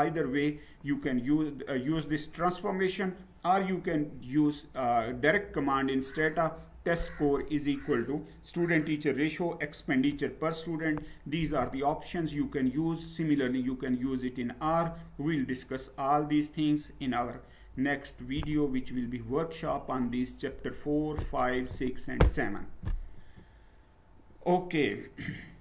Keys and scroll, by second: 5.1 Down, 23.1 Down.